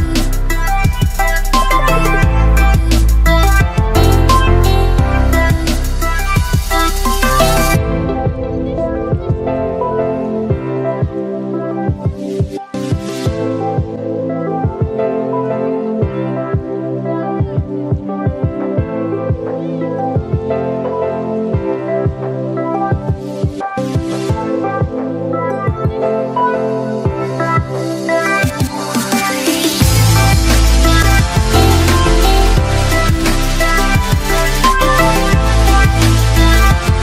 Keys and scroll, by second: 3.8 Return, 19.3 ctrl+i.